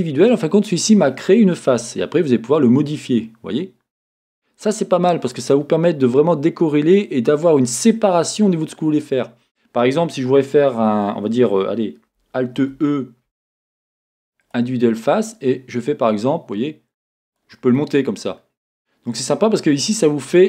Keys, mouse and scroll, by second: 2.6-6.5 drag, 6.4-10.2 scroll up 2, 10.2-10.9 scroll up 1, 10.9-12.5 scroll up 1, 12.5-15.3 scroll up 1, 15.3-16.5 scroll up 1, 17.4 click, 17.7-20.4 middle drag, 20.1 scroll.